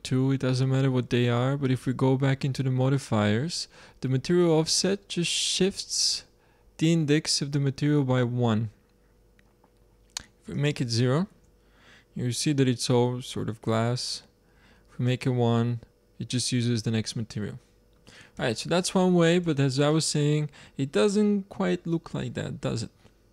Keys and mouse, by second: 1.6-4.1 drag, 10.5 click, 11.2 shift+z, 15.0 click, 16.4 click, 18.6 z, 19.0-19.8 drag, 19.3 z, 21.2 click, 22.9-23.3 middle drag.